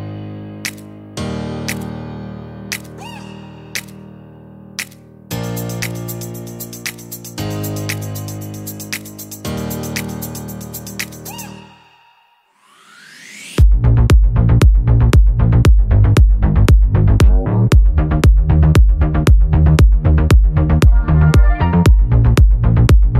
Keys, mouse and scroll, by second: 1.8 click, 3.8-6.4 drag, 9.4 click, 10.6 click, 12.1 ctrl+g, 13.3 click, 13.9 click, 15.0 ctrl+d, 15.6 ctrl+click, 16.2-17.7 ctrl+drag, 19.7 shift+click, 20.5 shift+right click.